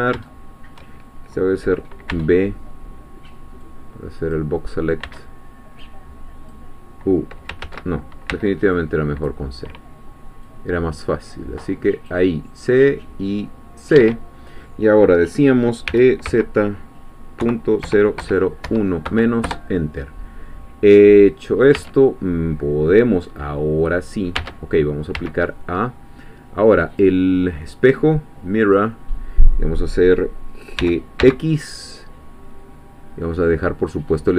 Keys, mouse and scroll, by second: 2.1 b, 3.6 click, 5.0 b, 5.8 click, 7.6 ctrl+z, 8.3 c, 8.8 click, 10.4-12.3 drag, 12.8-14.1 drag, 14.0 Escape, 15.9 e, 16.3 z, 17.4 ., 17.8 0, 18.6 1, 19.1 -, 19.4 Return, 20.8-21.8 scroll down 1, 21.8-22.8 scroll down 2, 21.8 Tab, 23.2-25.0 middle drag, 24.4 Tab, 25.2 a, 26.9 click, 28.6 click, 29.6-30.0 scroll up 1, 30.8 g, 31.2 x.